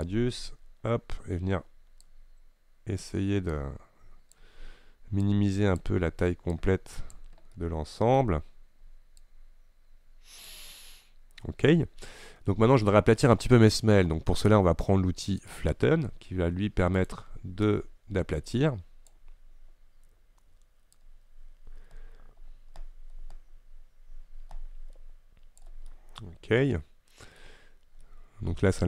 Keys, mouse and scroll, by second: 2.1-7.7 drag, 7.7-9.3 middle drag, 9.3-10.9 drag, 10.9-15.6 middle drag, 15.6-17.8 drag, 17.8-21.0 right drag, 21.0-24.7 drag, 26.0-28.8 middle drag.